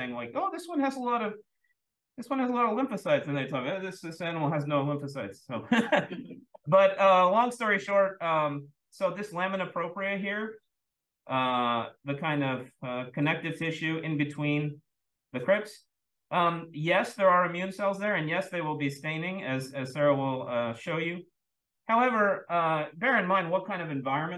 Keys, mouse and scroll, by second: 7.5 scroll up 2, 8.0-10.7 scroll up 2, 10.7-16.9 scroll up 1, 16.9-18.4 scroll up 1.